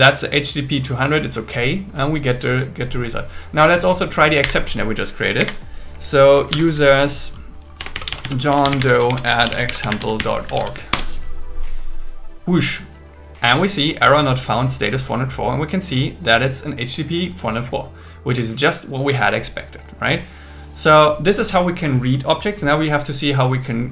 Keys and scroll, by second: 4.4 Up, 6.5 shift+7, 9.1 alt+l, 10.9 Return.